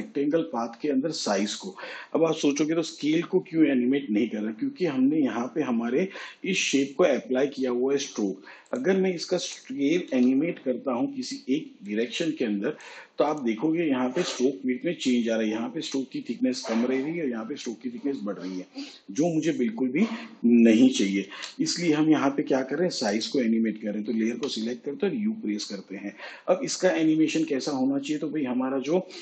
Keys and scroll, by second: 10.1 s, 21.2 ctrl+z, 24.3 u.